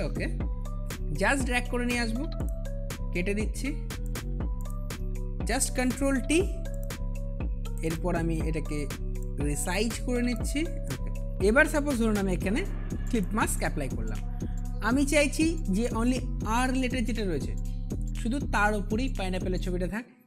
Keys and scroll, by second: 5.4 ctrl+t, 11.3 ctrl+alt+z.